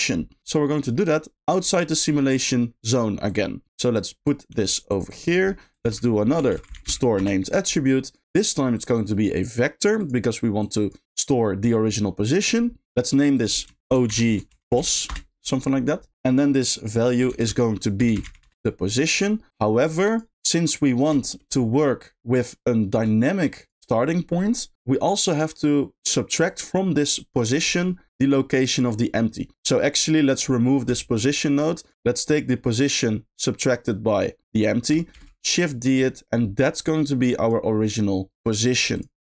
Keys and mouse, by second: 0.6 middle click, 0.9 middle click, 2.1 middle click, 3.2 click, 3.7 g, 4.3 click, 4.4 g, 5.1 click, 5.2 middle click, 5.8 shift+a, 8.7-10.1 drag, 10.7 click, 13.5-15.1 shift+drag, 16.1 middle click, 19.7-20.2 shift+drag, 21.2 shift+middle click, 23.0 g, 26.6 click, 27.7 middle click, 29.5 middle click, 29.9 click, 30.2 middle click, 30.9 x, 31.3 middle click, 31.8 click, 36.1 shift+middle click, 36.9 shift+click, 38.4 click, 38.6 click, 39.0 click.